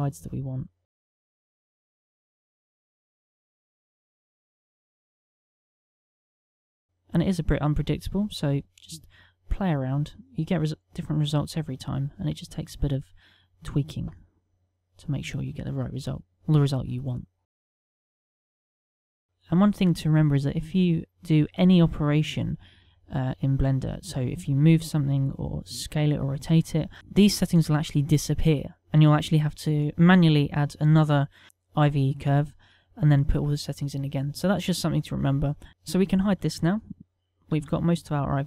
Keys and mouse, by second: 1.6 click, 2.1 middle click, 3.5 right click, 3.6 middle click, 5.9 click, 6.1 click, 6.5 click, 7.7 click, 10.5 middle click, 18.2 click, 31.7 shift+a, 37.6 t.